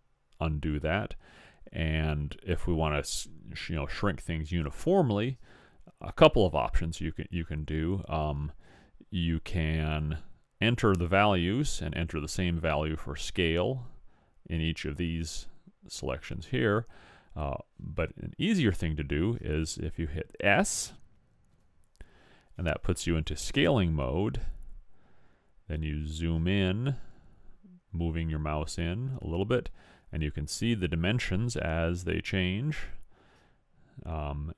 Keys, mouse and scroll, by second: 21.6 s.